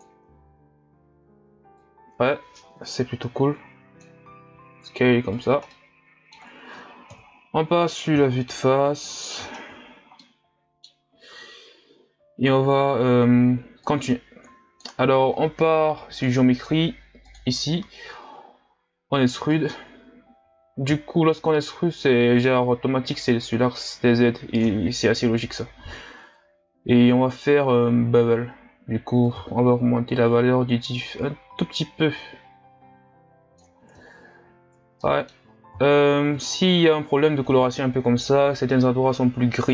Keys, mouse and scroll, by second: 1.7-4.5 drag, 4.5 s, 5.8-7.1 middle drag, 7.1 KP_1, 7.9-8.2 scroll down 4, 8.8-9.1 scroll down 6, 9.1-9.6 scroll up 9, 9.6-10.2 ctrl+scroll down 9, 10.2-11.5 middle drag, 11.5-12.1 scroll up 2, 13.9-18.2 drag, 18.2-18.6 scroll down 1, 19.5-22.5 drag, 29.2-34.2 drag, 34.2 ctrl+scroll down 2, 34.4-34.9 ctrl+scroll up 6, 35.0 middle click, 35.4-35.8 scroll up 3, 35.8-36.5 shift+scroll down 4, 36.5-38.6 ctrl+scroll up 3.